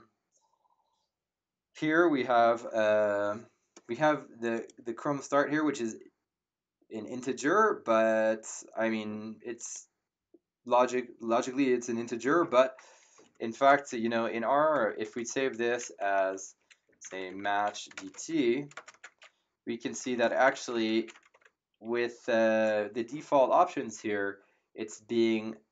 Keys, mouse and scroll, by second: 4.5 click, 9.5 click, 13.6 BackSpace, 14.8 shift+0, 15.1 ctrl+a, 16.0 Home, 16.5 Up, 16.6-21.6 typing, 18.9 Return.